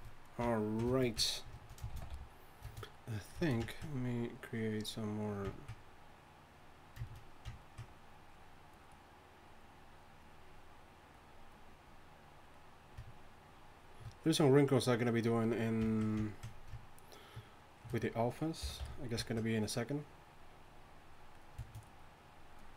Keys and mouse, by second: 1.9 shift+c, 2.1 f, 5.1-15.9 drag, 18.6 y, 18.8 f.